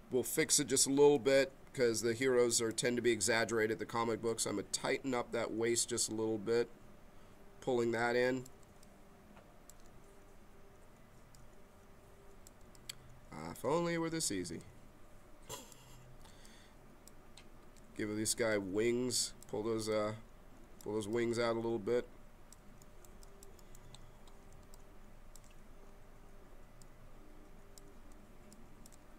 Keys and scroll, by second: 0.9 b.